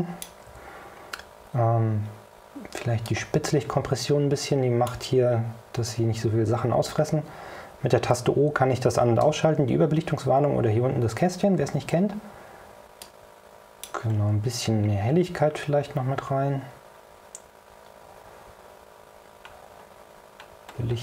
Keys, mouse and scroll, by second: 3.1-5.2 drag, 8.2 o, 9.3 o, 13.1 click, 14.3-14.8 scroll up 3, 15.5 scroll up 2, 19.3 scroll down 2, 20.1-21.0 scroll down 5.